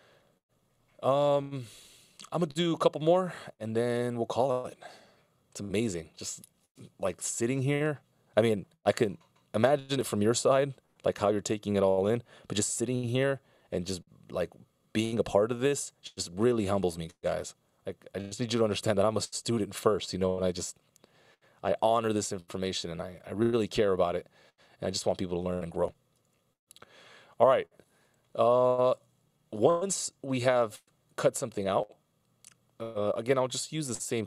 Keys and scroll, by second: 0.2 super+s, 17.8 F16, 18.5 super+s, 26.7 s, 34.0 c.